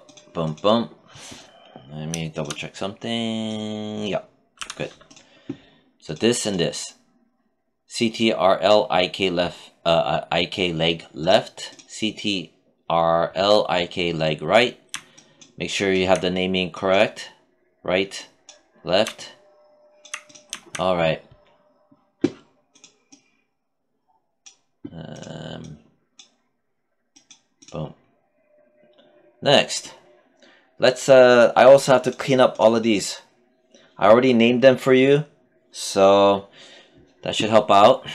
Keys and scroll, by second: 4.0 z.